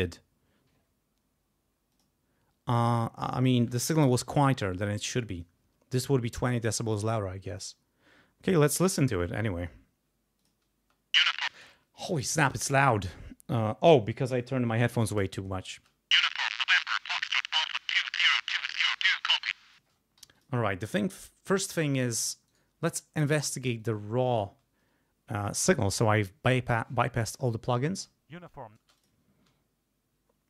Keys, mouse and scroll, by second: 1.9 click, 7.5 click, 10.4 click, 10.8 space, 11.5 space, 15.7 space, 19.8 space, 20.2 g, 20.4 click, 22.5 right click, 23.8 click, 26.7 scroll down 1, 27.2-27.7 scroll up 1, 27.9 space, 28.8 space, 29.0 alt+click, 29.5 alt+6.